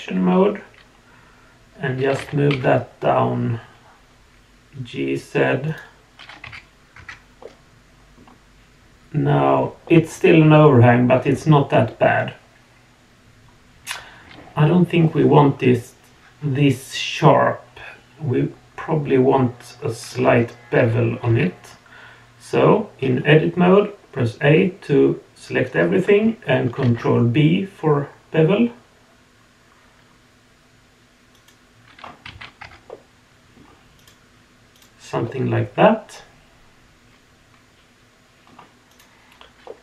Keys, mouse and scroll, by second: 0.0-2.0 middle drag, 2.1 g, 6.5 z, 6.9 Tab, 7.4-8.2 middle drag, 9.8-15.3 middle drag, 18.1 click, 20.2 Tab, 23.1-23.7 scroll up 2, 23.7-25.8 middle drag, 26.8 ctrl+b, 32.0 scroll down 1, 32.3 alt+a, 32.6 Tab, 32.9-33.6 middle drag, 34.0 click, 34.7 click, 35.2-36.7 middle drag, 36.7-38.5 drag, 38.9 click, 39.6-39.8 middle drag.